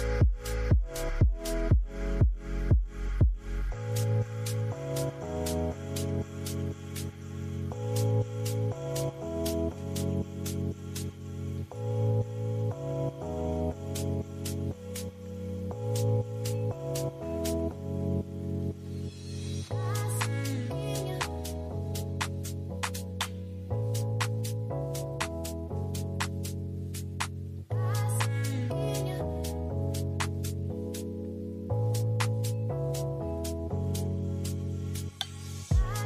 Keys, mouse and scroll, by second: 3.4 F11, 22.6-23.8 typing, 25.2-26.1 typing.